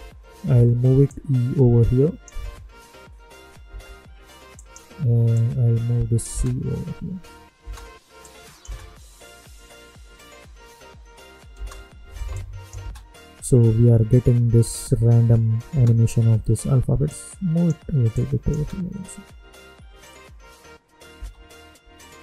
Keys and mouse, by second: 1.0-3.7 drag, 3.7 space, 4.5 click, 6.3 space, 8.2 click, 8.6 space, 11.5 space, 12.3 click, 12.8 space, 15.7 space, 17.0-18.5 drag, 18.5 space, 21.1 space.